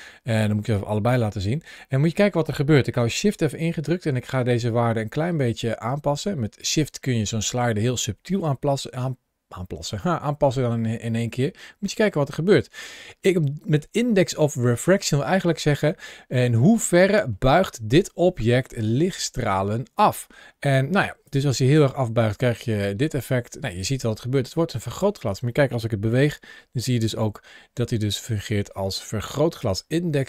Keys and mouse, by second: 4.2-6.4 shift+drag, 10.1-14.8 shift+drag, 15.8 shift+middle click, 16.3-18.4 middle drag, 18.7 shift+middle click, 19.2 middle click, 21.1-24.8 shift+drag, 25.9 g, 29.3 click.